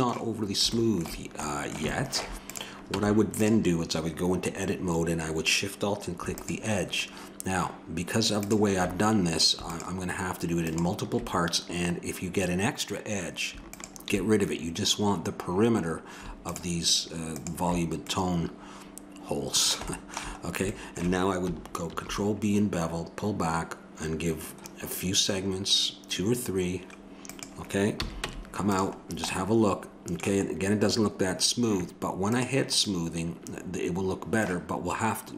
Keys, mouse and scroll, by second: 2.5-4.0 drag, 2.9 Tab, 4.5-6.3 middle drag, 6.3-8.0 drag, 8.4-12.3 drag, 13.7-18.6 drag, 18.6 middle click, 21.9 ctrl+b, 28.0 a, 28.2 Tab, 29.3 middle click, 32.3-33.7 drag, 33.7 middle click.